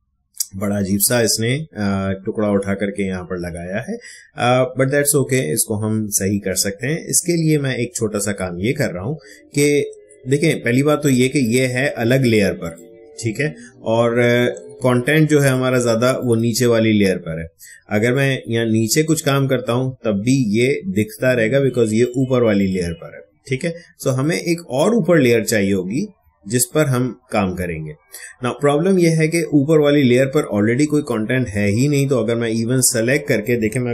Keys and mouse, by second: 14.8 click, 15.4 click, 22.0 click, 26.6 click, 31.0-33.9 drag.